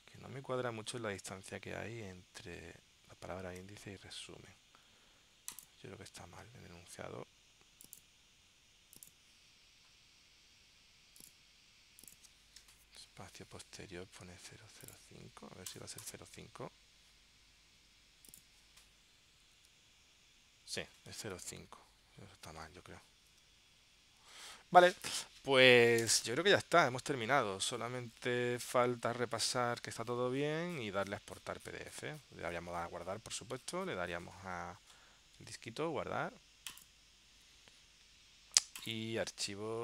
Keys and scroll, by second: 0.9 super+Tab, 3.6 super+Tab, 19.7 super+Tab, 21.3 super+Tab, 23.5 super+Tab, 24.5 super+Tab.